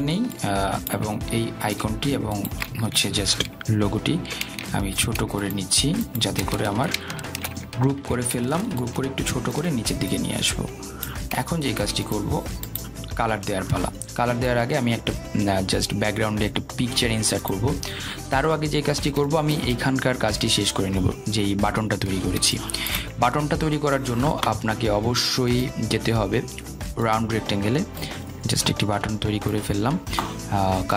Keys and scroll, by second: 9.0 ctrl+g.